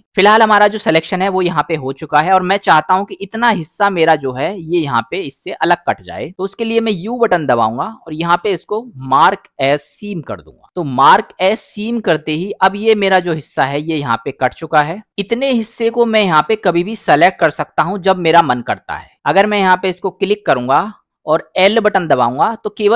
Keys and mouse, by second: 0.0-2.3 middle drag, 3.1 middle click, 7.1 u, 10.6 click, 11.3 middle click, 15.1 middle click, 18.9 middle click, 21.9 l.